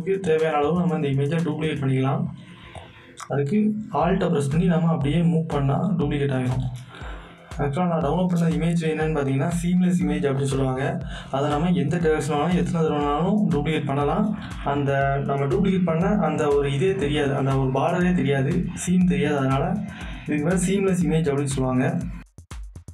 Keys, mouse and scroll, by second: 0.4 alt+scroll down 1, 2.5 click, 4.9-11.1 alt+drag, 11.6 alt+click, 12.1-15.5 alt+drag, 15.5 End, 17.1 right click, 17.4 click, 17.5 click, 19.5 scroll down 1, 20.5 scroll up 1, 20.6 scroll down 1, 22.4 click.